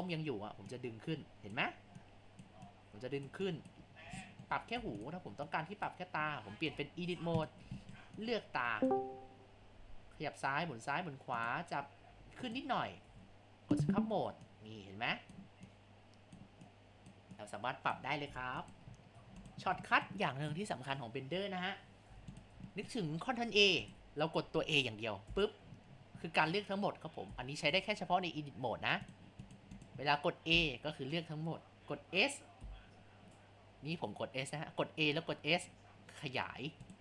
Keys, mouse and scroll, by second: 0.7-3.9 drag, 3.9-4.3 scroll up 3, 4.3 shift+middle click, 4.8 Tab, 5.5 click, 6.7 Tab, 7.8 shift+middle click, 8.2 click, 10.0 r, 12.1 g, 13.1 Tab, 14.5-18.3 drag, 18.3 Tab, 19.0 scroll down 3, 19.2 Tab, 19.8-21.9 shift+middle drag, 21.9 scroll up 2, 22.1 Tab, 22.7 shift+middle click, 23.5 Tab, 25.2 a, 25.9-26.3 scroll down 4, 26.3 scroll up 5, 27.0 scroll down 3, 27.7 Tab, 29.5-29.9 drag, 30.5 a, 30.9 scroll up 2, 32.2 scroll down 1, 32.6 s.